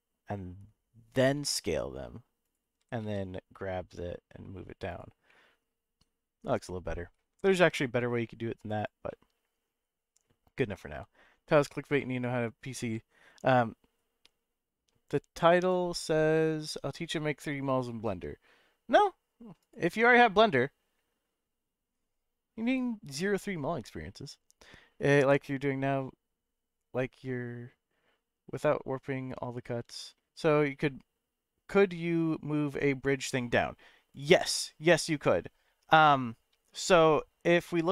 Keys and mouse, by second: 1.0 click, 1.3 s, 2.4 click, 2.8 g, 3.0 z, 4.9 click, 5.2-7.2 middle drag, 7.3 g, 7.5 z, 8.7 click, 9.1-10.8 middle drag, 12.0 shift+middle click.